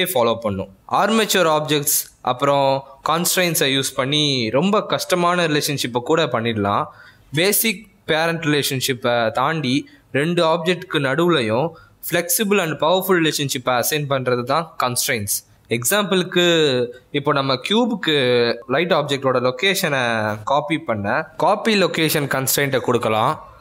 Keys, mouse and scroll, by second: 0.6 x, 1.3 click, 3.1 click, 4.1 click, 4.1 x, 4.6 click, 13.3 click, 15.6 click, 15.8 g, 17.1 click, 18.1 click, 22.6 click, 22.8 g.